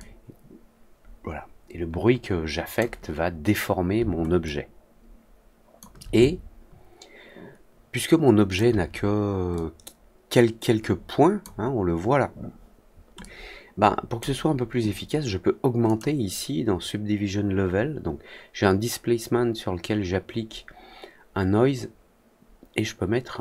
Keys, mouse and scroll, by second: 4.4-5.7 alt+drag, 6.1-8.5 alt+drag, 9.5-11.3 drag, 13.1 click, 15.8 click.